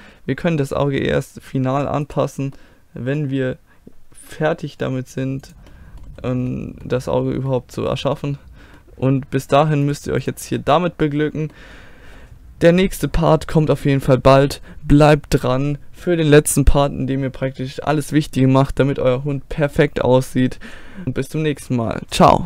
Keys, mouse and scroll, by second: 2.1-4.2 right drag, 4.2 g, 5.7-8.3 middle drag, 9.9-11.4 drag, 11.0 middle click.